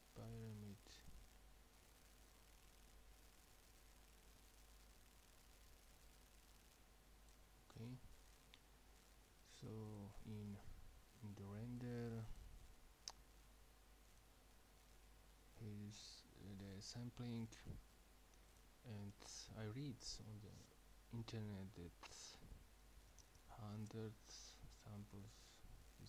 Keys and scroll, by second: 23.0 typing, 25.9 typing.